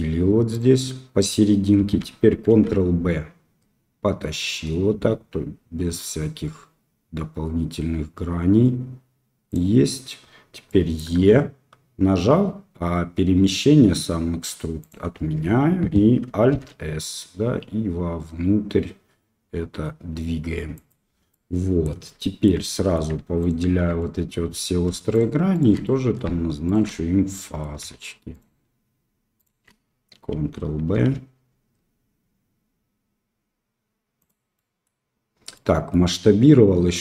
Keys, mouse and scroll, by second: 2.5 ctrl+b, 10.6 middle click, 11.1 e, 16.4 alt+s, 21.3 middle click, 22.1 shift+middle click, 22.7 middle click, 23.3 alt+click, 23.9 middle click, 25.1 alt+shift+click, 25.5 alt+shift+click, 25.8 middle click, 26.6 alt+shift+click, 27.3 middle click, 27.5 click, 28.3 alt+shift+click, 29.3 alt+shift+click, 30.9 ctrl+b, 34.5 middle click, 35.5 middle click.